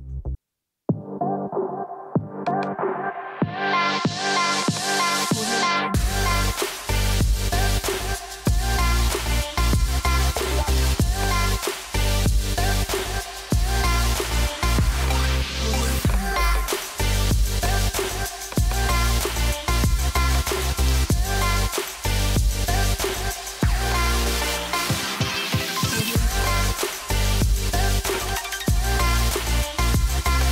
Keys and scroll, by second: 3.2 BackSpace.